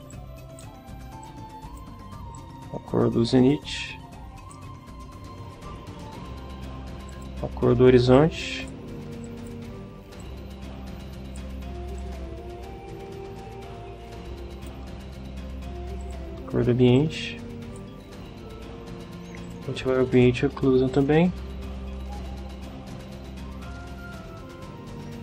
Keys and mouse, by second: 0.1 click, 1.2 click, 2.4-4.7 drag, 7.1 click, 8.2 click, 9.2 click, 10.2-11.6 drag, 12.0-14.9 drag, 16.0 click, 17.0-18.0 drag, 19.4 click, 20.1 click, 20.9 click.